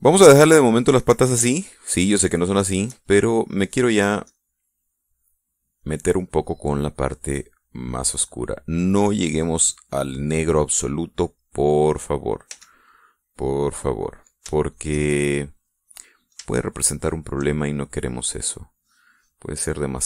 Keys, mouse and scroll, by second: 0.1-1.1 middle drag, 1.7 middle click, 2.5 shift+middle click, 3.4-4.5 shift+middle drag, 5.2 click, 6.8 click, 8.0-10.8 drag, 12.4 middle click, 13.5 f, 14.6 click, 15.5-16.5 shift+middle drag, 16.9 middle click, 17.5 shift+middle click, 18.9 middle click.